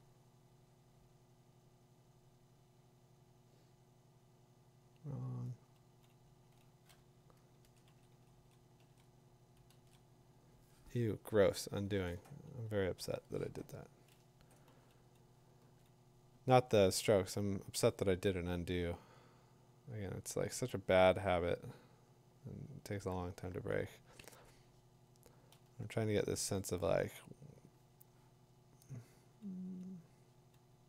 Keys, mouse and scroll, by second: 5.8 [, 7.6 ctrl+z, 7.9 ctrl+z, 8.4 ctrl+z, 8.8 ctrl+z, 9.7 ctrl+z, 12.1 ctrl+z, 12.9 ctrl+z, 16.9 [, 17.9 click, 17.9 2, 25.4 ], 25.6 ], 26.2 ].